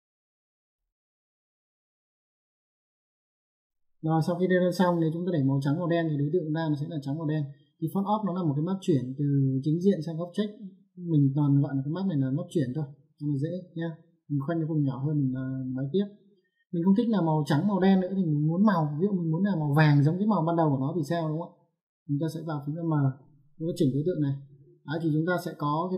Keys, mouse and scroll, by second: 0.5 click, 14.6 click, 23.1 click, 23.4 m, 24.2 click.